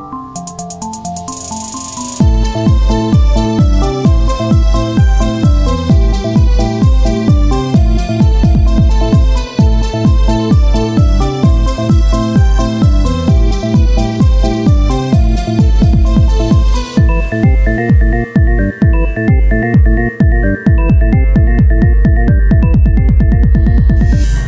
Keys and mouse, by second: 0.7 z, 1.2 Tab, 6.9-9.3 drag, 7.4 z, 8.3 s, 9.4 z, 9.9-11.6 drag, 13.3 click, 13.7 KP_1, 14.2 z, 14.8 Tab, 17.6 ctrl+z, 19.1-20.3 drag, 20.3 Tab, 21.5 click, 23.2 Tab, 23.2 click.